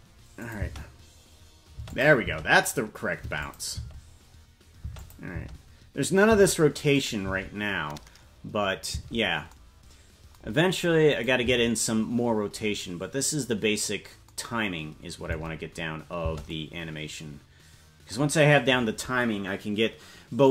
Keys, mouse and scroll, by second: 0.4 click, 0.6 space, 1.9 click, 1.9 space, 2.2 space, 3.4 click, 3.4 space, 3.7 space, 5.0 click, 5.0 space, 5.3 space, 7.0 click, 7.0 space, 7.2 space, 9.5 space, 11.2 click, 11.8 space, 16.2 space.